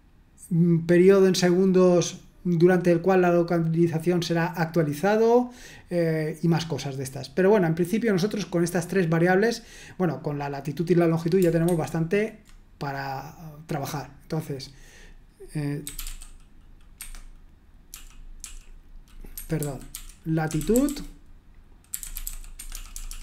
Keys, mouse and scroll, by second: 11.7 super+1, 14.4 click, 15.6-16.5 typing, 17.0 Escape, 17.6-18.4 typing, 19.3 Escape, 19.7-23.2 typing.